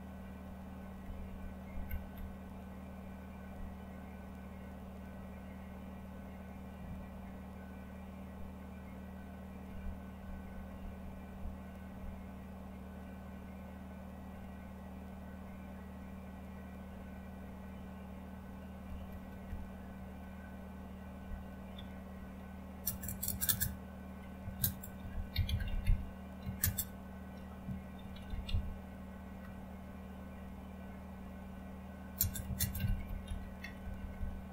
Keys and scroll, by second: 0.1 Down, 0.7 Down, 1.0 Down, 1.2 Down, 1.5 Down, 1.8 Down, 2.1 Down, 3.4 Down, 10.6 Down, 11.0 Down, 11.2 Down, 11.8 Down, 19.4 Up, 21.7 #, 22.8-26.5 typing, 27.6-29.4 typing, 32.8-34.5 typing.